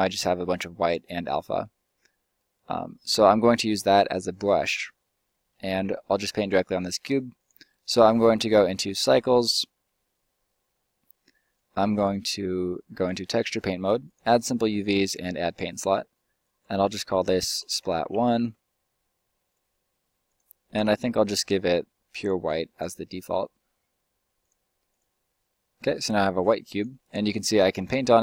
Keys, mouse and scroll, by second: 4.6-5.7 middle drag, 5.8 Tab, 11.9-16.7 drag, 25.4-25.9 middle drag, 26.9-28.2 drag.